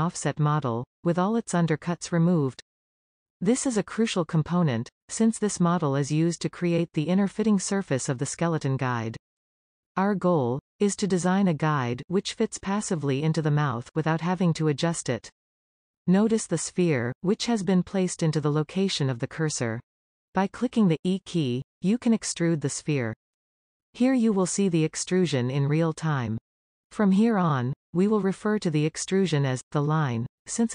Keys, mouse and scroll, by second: 19.1-21.4 middle drag, 22.1 e.